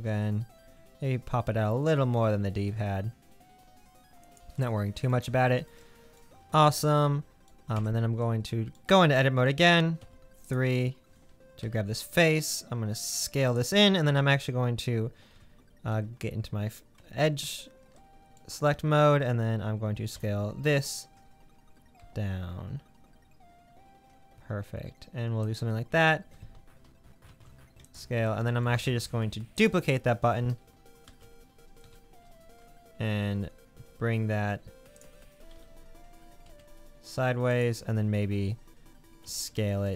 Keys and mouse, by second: 7.8 Tab, 10.0 3, 11.6 i, 15.3 1, 15.9 2, 20.2 g, 26.0 Tab, 27.3 ctrl+a, 29.5 middle click, 31.0 shift+d, 35.6 g, 39.3 s.